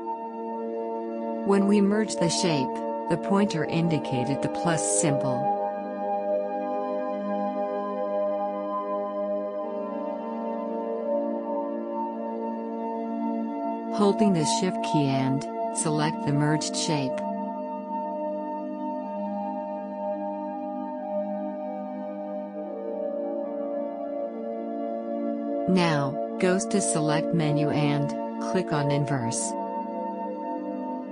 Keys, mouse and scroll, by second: 25.3-29.9 drag, 29.9-31.1 drag.